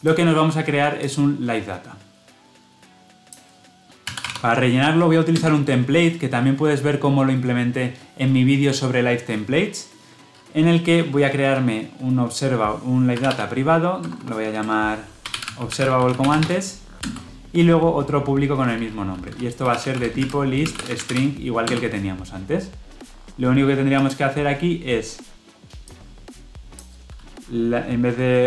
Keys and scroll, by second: 5.3 Return, 21.6 Return.